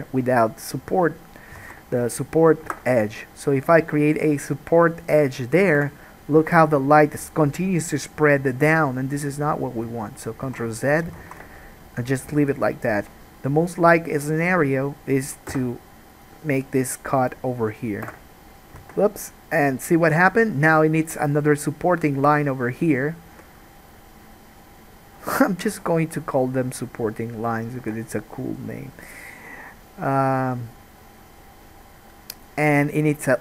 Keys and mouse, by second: 1.9 alt+a, 2.8 k, 6.5 alt+a, 10.6 ctrl+z, 11.3 ctrl+z, 15.7 k, 18.2-33.4 middle drag, 19.1 alt+a, 23.5 k, 28.0 alt+a.